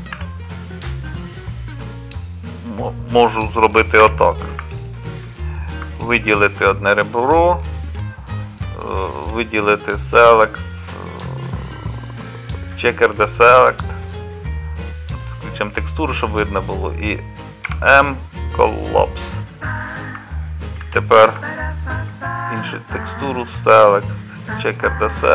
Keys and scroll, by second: 0.1 z, 4.1 2, 17.7 m, 20.8 z.